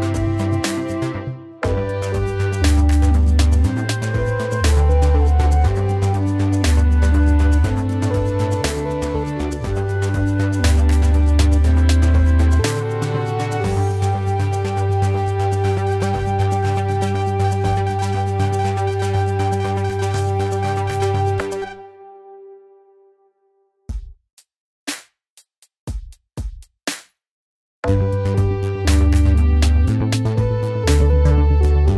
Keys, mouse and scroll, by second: 7.0 alt+Left.